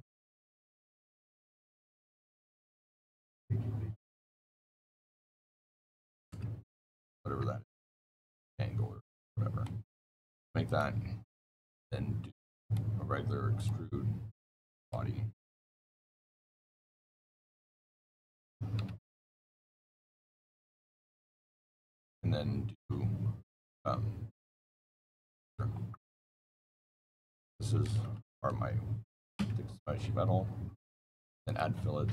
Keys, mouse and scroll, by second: 0.4 right click, 1.6 click, 1.9 click, 2.7 KP_2, 2.9 KP_Enter, 4.8 click, 5.1 click, 5.6 KP_1, 5.9 KP_Decimal, 6.0 KP_5, 6.2 KP_Enter, 7.2 Escape, 9.5 middle click, 10.6 click, 12.5 click, 13.4 click, 14.7 click, 15.9 click, 17.2 click, 18.7 KP_1, 19.4-21.1 scroll, 19.4 middle click, 19.5 middle click, 21.3 click, 22.7 scroll, 25.2 click, 25.4 click, 26.6 click, 27.6 KP_Decimal, 27.7 KP_0, 27.8 KP_5, 28.0 KP_9, 29.2 KP_Enter, 30.3-30.6 scroll, 31.3 click.